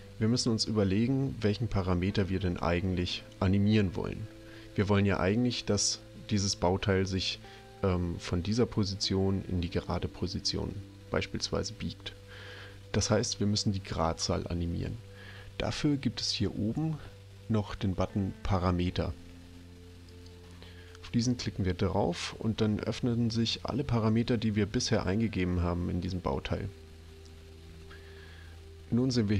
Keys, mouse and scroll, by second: 20.1 click, 24.7 scroll down 1, 25.9 scroll up 1, 28.2 scroll down 1.